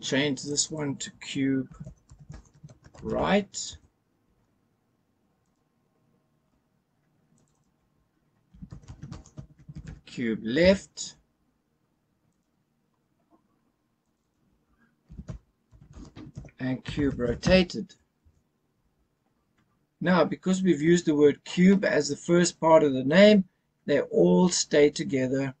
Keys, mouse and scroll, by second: 0.4-3.7 drag, 5.4 click, 7.3 click, 7.5-10.6 drag, 12.2 click, 14.0 click, 14.2-18.2 drag.